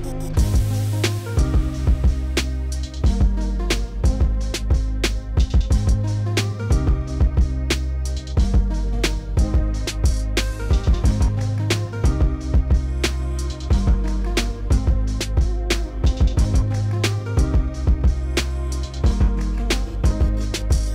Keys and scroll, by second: 8.7 2, 15.6 s, 16.4 3, 20.0 s.